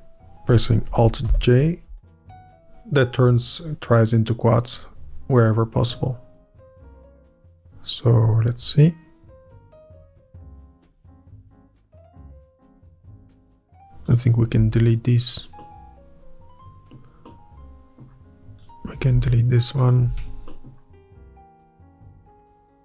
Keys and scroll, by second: 0.0 Up, 1.0 alt+Up, 1.9-3.7 scroll up 1, 11.4 é, 13.8 Up, 20.1 ctrl+x, 20.6 Up.